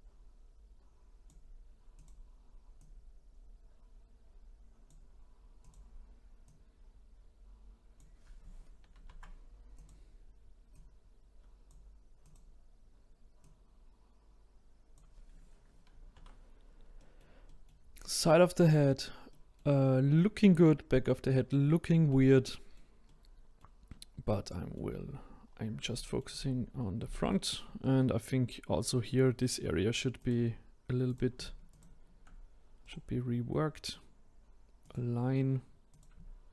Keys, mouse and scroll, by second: 1.9 click, 2.8 click, 5.6-6.7 drag, 8.9 ctrl+z, 9.7 click, 10.7 click, 12.2 click, 13.4 click, 15.9 ctrl+z, 16.4-16.9 scroll down 2, 16.9-25.4 middle drag, 25.4-25.9 scroll down 1, 25.9 shift+middle click, 26.4-27.1 scroll up 1, 27.1-30.2 shift+middle drag, 30.2 click, 31.1-31.8 drag, 32.8-35.9 right drag, 35.9 click.